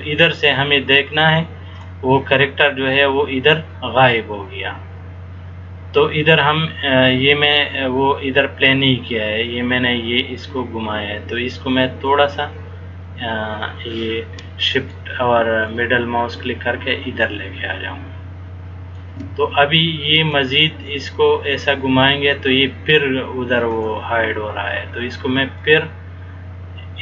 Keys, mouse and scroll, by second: 12.2 middle click, 15.8 shift+middle click, 20.5 click, 25.8 shift+middle click.